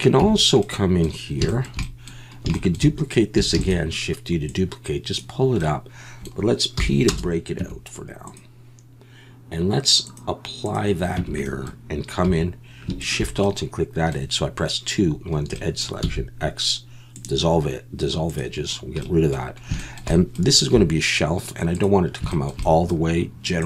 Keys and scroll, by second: 0.2 Tab, 3.5 shift+d, 6.8 p, 7.6 Tab, 11.2 Tab, 12.3 2, 16.0 x, 20.7 3.